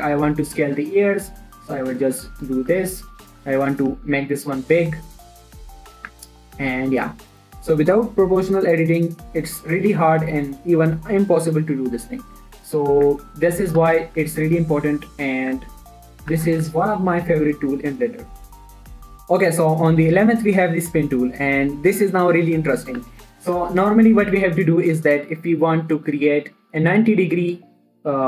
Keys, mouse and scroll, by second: 0.2 click, 0.5 s, 0.9-2.1 scroll up 1, 2.1 click, 2.2 g, 2.8 click, 3.1 shift+middle click, 3.3-3.7 shift+scroll down 1, 3.7 click, 4.0 s, 5.0-5.3 scroll up 1, 6.3 click, 6.5 Tab, 7.0 middle click, 7.9 1, 12.8 scroll up 1, 13.2 scroll down 1, 13.4 Tab, 14.0 click, 14.2 g, 14.5 z, 15.3 click, 15.4 Tab, 16.5 click, 16.7 g, 17.0 z, 17.3 click, 18.9 alt+shift+click, 23.4 1, 24.3 shift+middle click, 25.4-27.2 scroll down 1.